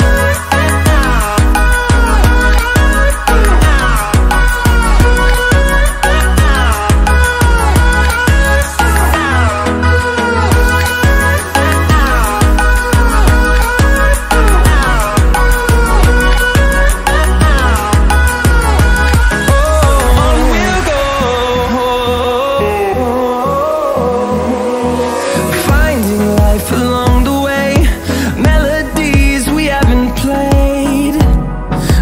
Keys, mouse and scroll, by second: 0.8 click, 3.8 click, 5.9 scroll up 1, 6.6 click, 6.9 scroll up 1, 7.1 click, 7.9 scroll up 1, 8.5-11.4 drag, 11.4-12.2 scroll down 1, 13.2-13.8 scroll down 4, 14.5 scroll down 1, 16.2 alt+scroll up 1, 16.7 scroll down 1, 16.8 alt+scroll up 1, 17.9-18.3 typing, 18.7-21.0 drag, 21.0 click, 21.3 ctrl+z, 22.2 click, 23.1-23.4 typing, 23.8-25.4 drag, 25.4-26.3 scroll down 1, 26.7 ctrl+scroll up 1, 27.0 ctrl+z, 28.0 typing, 28.8-30.8 drag, 31.5 click, 31.6 ctrl+z.